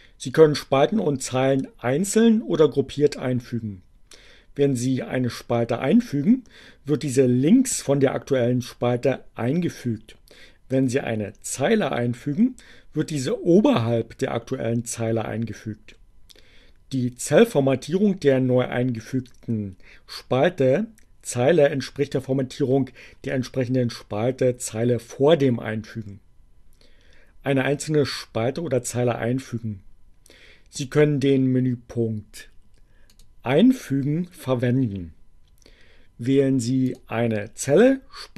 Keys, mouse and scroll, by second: 33.2 click, 36.9 click.